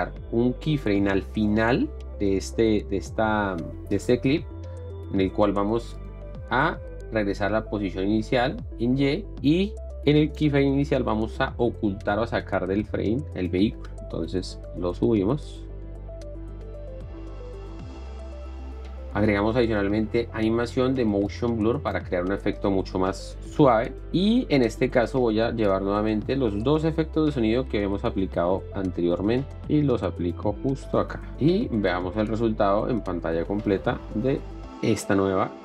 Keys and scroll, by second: 23.6 shift+4, 34.4 Up.